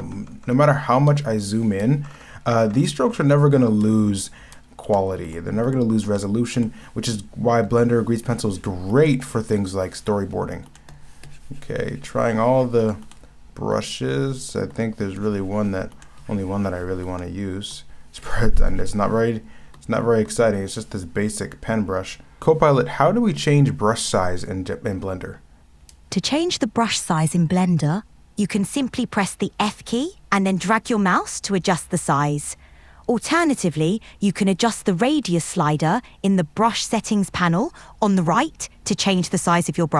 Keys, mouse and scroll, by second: 1.1 ctrl+z, 1.9 ctrl+shift+z, 2.0 scroll up 1, 2.6-3.1 scroll down 2, 3.5 scroll up 1, 4.8 scroll up 1, 4.9 ctrl+shift+z, 5.7 ctrl+z, 6.0 scroll up 1, 6.2 ctrl+z, 6.7 ctrl+z, 10.7 ctrl+z, 12.9 ctrl+z, 13.0 ctrl+z, 16.0 ctrl+z, 17.0 ctrl+z.